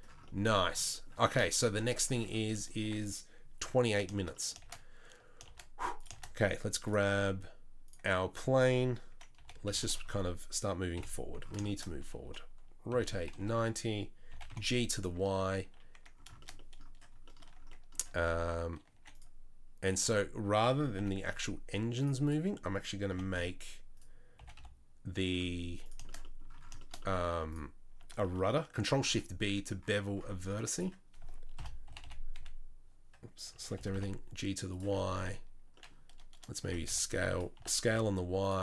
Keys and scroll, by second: 2.8 Tab, 4.6 shift+a, 5.4 shift+s, 6.1 shift+a, 9.4 r, 10.9 KP_7, 12.9 r, 14.3 g, 15.3 Tab, 18.1 Tab, 18.4 Tab, 18.9 1, 19.9 2, 21.0 g, 23.1 g, 24.4 g, 27.3 1, 31.6 ctrl+shift+l, 31.8 g, 32.0 y, 32.3 x, 33.5 a, 33.7 g, 36.6 s, 37.5 s.